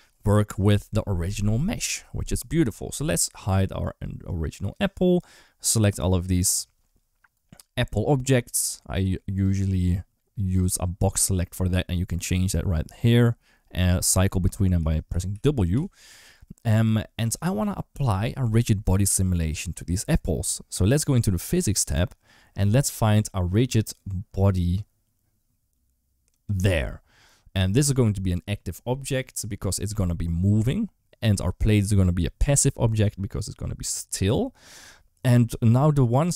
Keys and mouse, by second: 8.6 click, 9.6 click, 14.6 w, 14.9 w, 15.1 w, 15.6 w, 26.2 click.